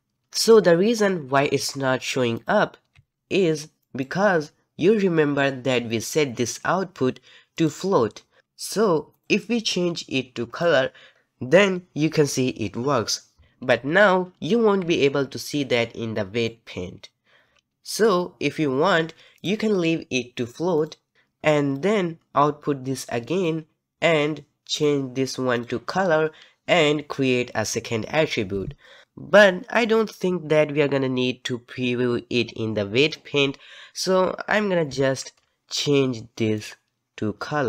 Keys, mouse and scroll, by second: 2.4 click, 3.1 z, 10.6-14.8 drag, 14.8 ctrl+Tab, 15.7-20.9 middle drag, 20.9 click, 23.4-34.9 drag, 34.9 ctrl+z.